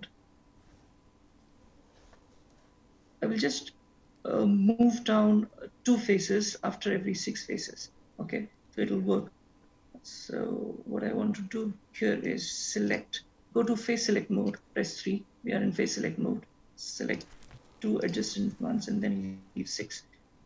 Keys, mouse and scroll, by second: 12.8 click, 14.5 3, 17.5 click, 18.3 shift+click.